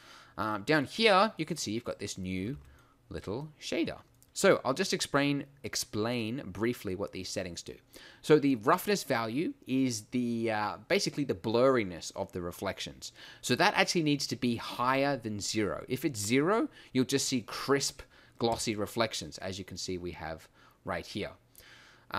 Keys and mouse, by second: 2.6 g.